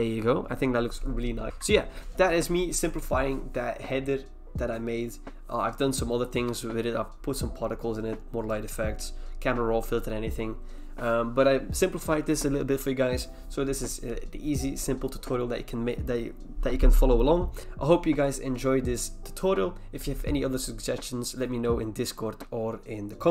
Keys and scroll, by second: 1.5 ctrl+e.